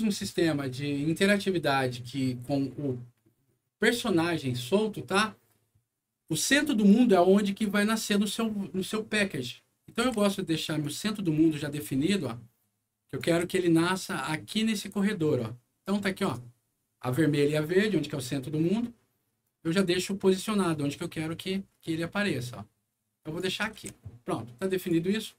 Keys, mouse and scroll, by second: 7.0-8.0 drag, 10.0 e, 10.8-13.2 drag, 13.3 w, 14.4-16.2 drag, 19.4-23.3 drag, 23.7 alt+w, 24.8 alt+click.